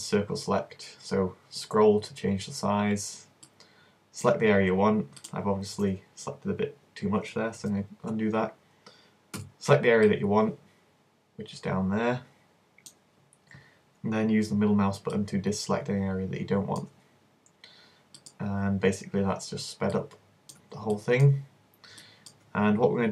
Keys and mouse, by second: 7.7 super+z, 9.4 c, 20.0-23.1 middle drag, 20.6 z.